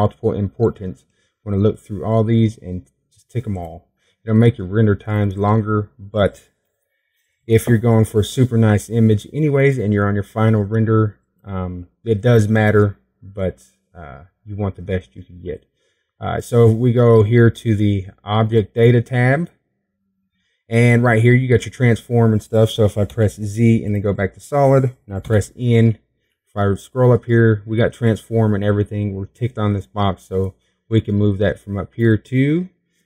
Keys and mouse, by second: 26.5 z, 28.7 n.